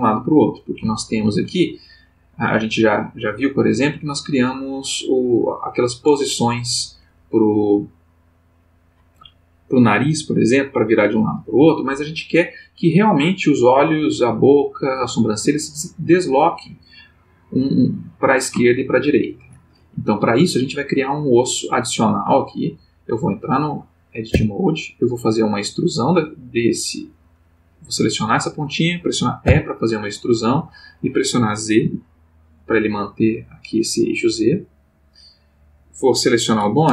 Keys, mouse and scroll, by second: 1.0 shift+middle click, 2.1 click, 18.6 shift+middle click, 21.9 click, 24.3 Tab, 25.0 click, 27.7 click, 29.4 e, 31.8 z, 34.6 click, 35.2 click.